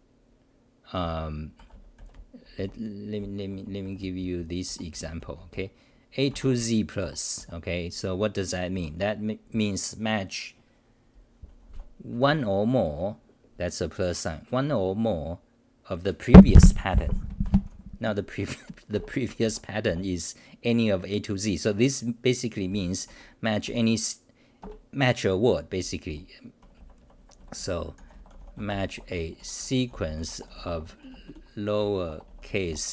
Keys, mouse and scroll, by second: 0.8-6.0 typing, 7.0 Home, 7.4 r, 8.7 g, 11.5-12.8 typing, 19.4 ctrl+g, 19.4 m, 19.8 1, 23.0 Home, 23.6 g, 24.6 ctrl+g, 26.1 t, 26.6 ., 27.7-28.5 typing.